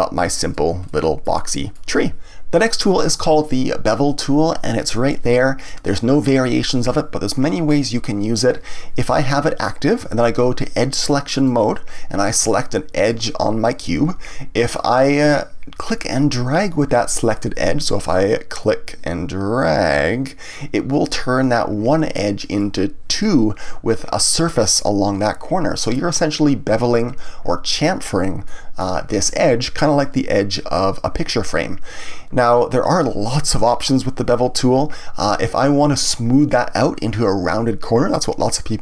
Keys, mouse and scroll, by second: 0.8-2.2 middle drag, 5.5 click, 11.4 click, 11.9-13.0 middle drag, 13.0 click, 14.6-17.6 scroll up 1, 18.6 click, 28.4-31.5 middle drag.